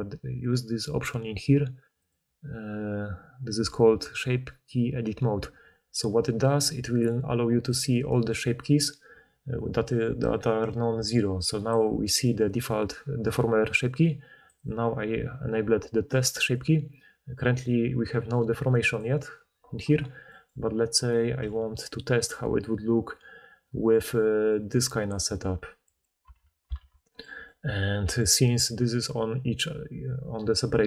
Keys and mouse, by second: 2.1-7.8 middle drag, 14.6 click, 16.5-21.0 drag, 21.0 middle click, 21.1-26.1 drag, 21.4 g, 26.1-30.8 middle drag, 26.3 Tab, 26.8 alt+a.